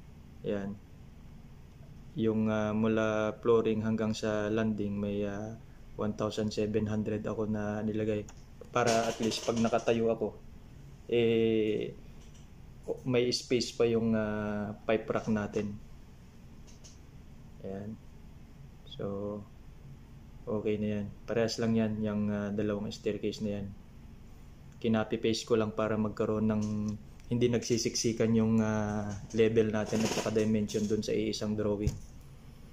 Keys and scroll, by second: 0.8-1.6 typing.